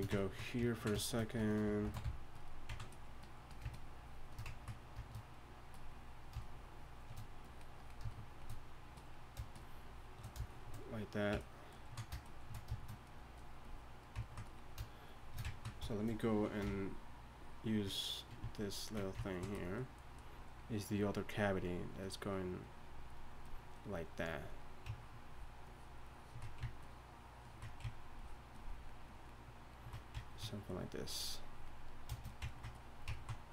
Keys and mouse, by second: 2.0 shift+c, 4.5 shift+f.